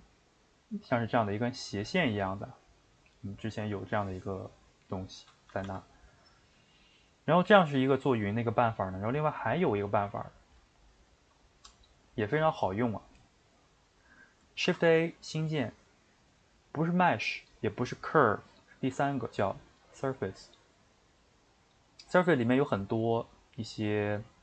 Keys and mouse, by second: 5.5 a, 5.6 a, 9.6-11.0 middle drag, 11.0-24.4 shift+right drag.